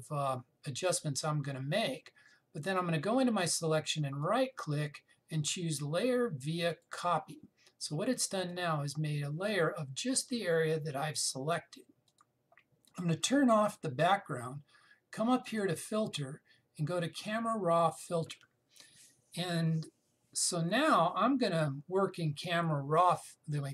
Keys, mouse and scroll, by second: 4.7 right click, 7.4 click, 12.7 click.